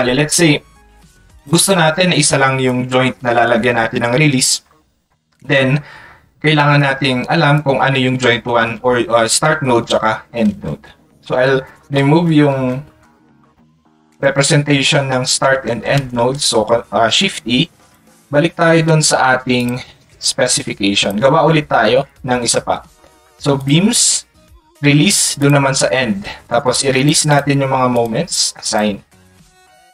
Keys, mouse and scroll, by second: 17.8 click, 19.6 click, 20.7 click, 22.1 click, 25.4 click, 27.3 click.